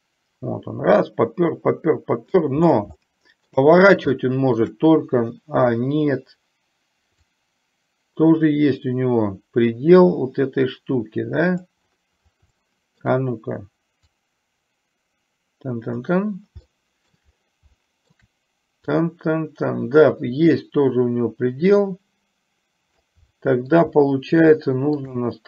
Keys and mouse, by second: 3.1 shift+middle click, 4.2 shift+middle click, 7.4-11.8 drag, 12.7 shift+middle click, 14.2-16.2 drag, 16.7-17.2 shift+middle drag, 17.8 shift+middle click, 18.9-23.2 drag, 23.3-23.7 shift+middle drag, 24.7 shift+middle click, 25.2 middle click.